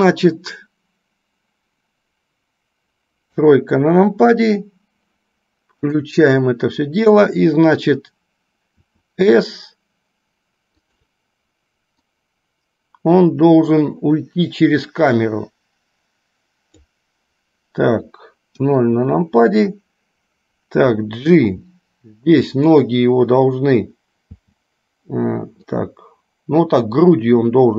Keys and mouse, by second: 6.0 click, 12.0-17.0 drag, 24.5 g.